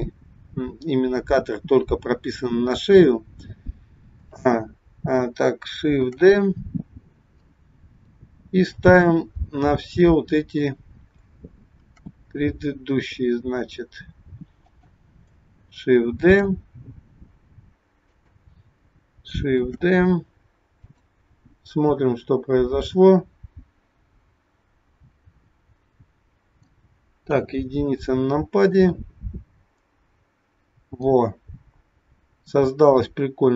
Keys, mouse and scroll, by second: 6.1 shift+d, 9.4-9.9 scroll up 2, 9.9 middle click, 9.9-10.6 scroll up 1, 12.0 shift+d, 16.2 shift+d, 19.7 shift+d, 22.0 click, 27.3 KP_1, 28.9 click.